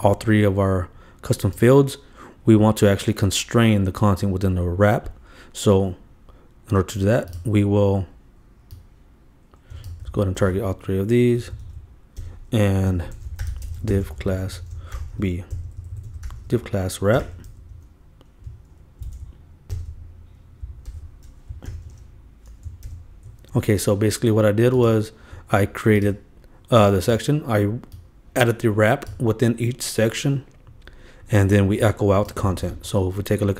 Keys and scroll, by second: 10.1 super+d, 11.5 super+Right, 12.2 super+Return, 12.9 shift+Return, 12.9-15.3 typing, 16.9-17.8 typing, 18.6 shift+Right, 19.6 shift+super+Down, 19.8 shift+super+Return, 20.9 super+v, 21.7 super+[, 22.7 alt+super+[, 22.8 alt+super+l, 23.4 super+s, 32.5 super+s.